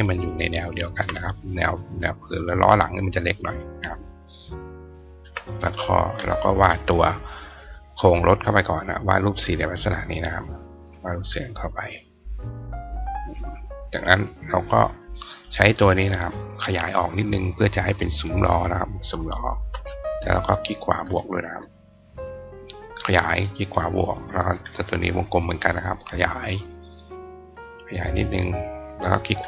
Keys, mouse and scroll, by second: 0.1 ctrl+click, 1.9-3.1 drag, 3.4 click, 3.9-5.1 ctrl+drag, 5.3 click, 7.3 click, 8.4-12.5 drag, 14.2 click, 15.0 click, 18.2 shift+click, 20.7 click, 21.9-23.3 shift+drag, 23.1 shift+right click, 24.0 click, 25.0 click, 26.4-29.2 shift+drag, 29.0 shift+right click.